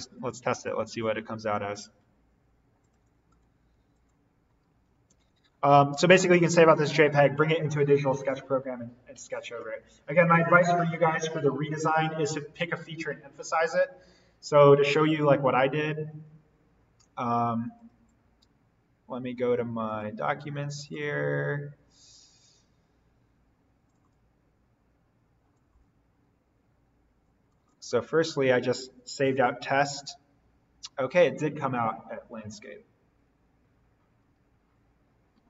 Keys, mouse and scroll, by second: 0.5 click, 4.5-5.9 typing, 6.5 click, 17.7 click, 20.1 click, 23.8 click.